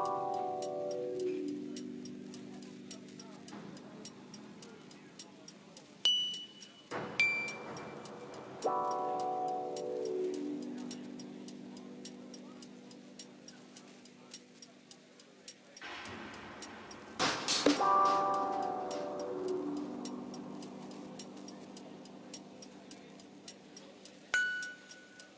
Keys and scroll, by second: 4.2 Tab, 5.6 Tab, 6.7 1, 8.6 Tab, 9.7 s, 9.8 z, 11.3 g, 11.5 z, 20.8 ctrl+j, 25.0 Tab.